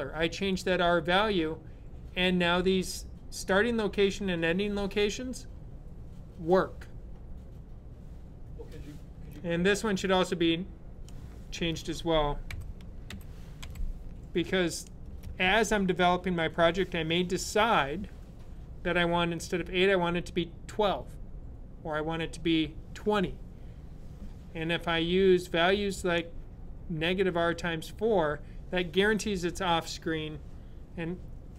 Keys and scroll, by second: 12.3-13.9 typing.